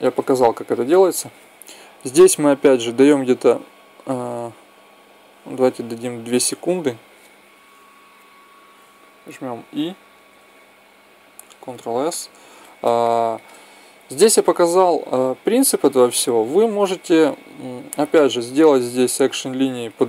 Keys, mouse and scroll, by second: 0.9 Escape, 9.9 e, 13.8-15.7 ctrl+middle drag.